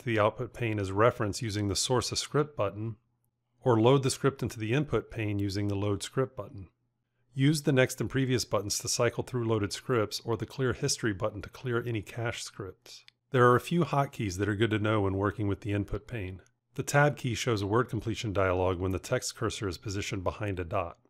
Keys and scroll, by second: 17.4 Tab.